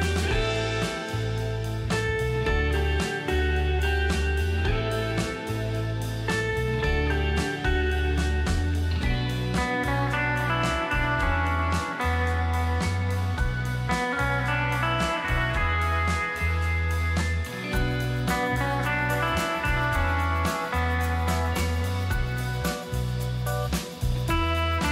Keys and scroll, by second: 0.4 shift+Left, 7.3-10.1 typing, 8.1 Tab, 16.0 space.